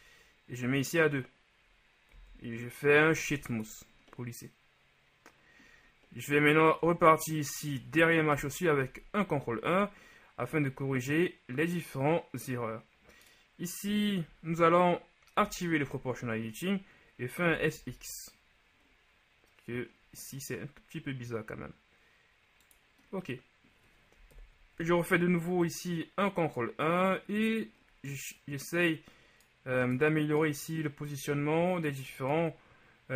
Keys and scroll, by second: 2.3 w, 7.0 Tab, 8.4 ctrl+KP_1, 15.5 ▯, 17.6 s, 17.8 x, 24.4 ctrl+KP_1.